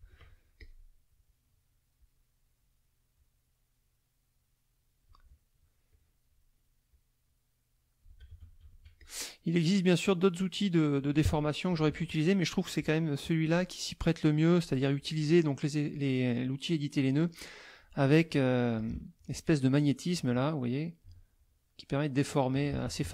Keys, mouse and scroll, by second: 0.5 click, 2.0 click, 3.1-5.2 drag, 5.9 click, 6.9-8.3 drag, 8.3 ctrl+z, 8.6 ctrl+click, 9.0 ctrl+shift+click, 10.0-11.1 drag, 11.2 F1, 11.7 KP_Subtract, 12.7 middle click, 14.6 middle click, 15.9 click, 17.5 middle click, 18.3 click, 18.7 shift+click, 20.3-22.7 drag, 22.7 ctrl+alt+z, 23.0 ctrl+alt+F1.